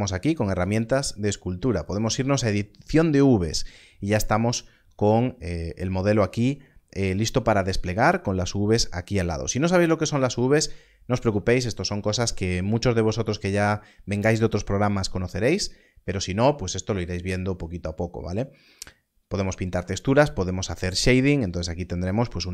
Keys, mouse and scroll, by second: 18.7 click.